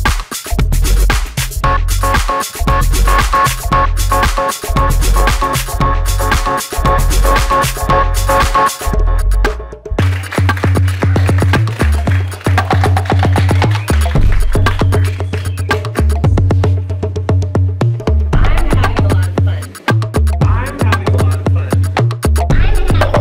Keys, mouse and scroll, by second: 20.5 Escape.